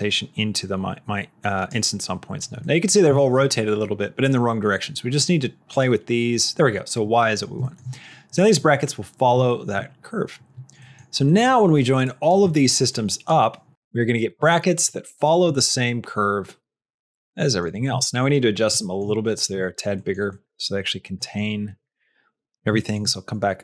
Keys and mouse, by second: 2.5 middle click, 3.0 shift+middle click, 5.6 click, 7.1 middle click, 7.5 shift+middle click, 9.3 shift+middle click, 10.8 middle click, 11.2 middle click, 12.0 click, 12.4 middle click, 12.8 click, 14.2 middle click, 15.0 shift+middle click, 15.4-17.5 middle drag, 17.9 shift+middle click, 18.8 shift+middle click, 20.0 shift+middle click, 20.2 shift+middle click, 20.6 shift+middle click, 21.2 shift+middle click, 21.7 shift+middle click, 22.8 shift+middle click.